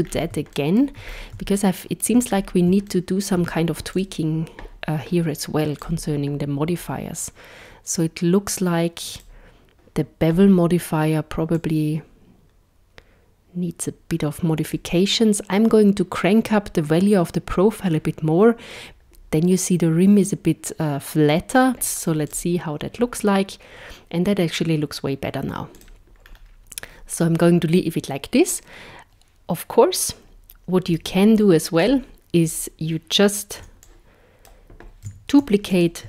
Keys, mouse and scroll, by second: 0.1 scroll up 3, 0.6 shift+middle click, 1.1 scroll up 4, 1.6 shift+middle click, 2.3-2.7 scroll up 2, 2.9 shift+middle click, 4.0 click, 5.8 click, 9.1 click, 11.5 click, 21.7 scroll down 10, 21.7 z, 25.8 click, 26.3 scroll down 2, 30.9 z, 33.6 b, 35.8 shift+d.